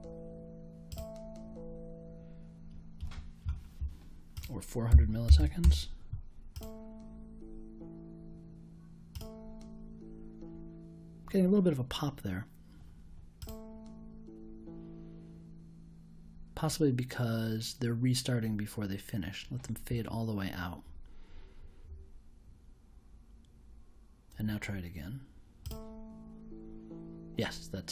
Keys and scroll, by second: 4.9 4, 5.2 0, 5.6 Return.